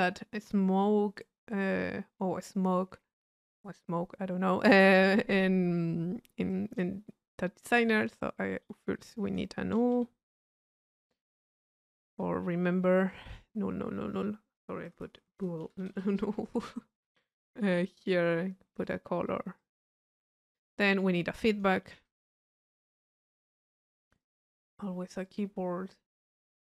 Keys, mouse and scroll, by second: 6.5 click, 7.1-8.5 middle drag, 8.5 right click, 9.3 click, 10.9 Delete, 12.3 u, 15.1 Delete, 16.3 u, 17.3 click, 18.0 click, 18.9 click, 19.6 click, 20.9-21.9 drag, 23.1 click, 23.9 click, 25.3 click.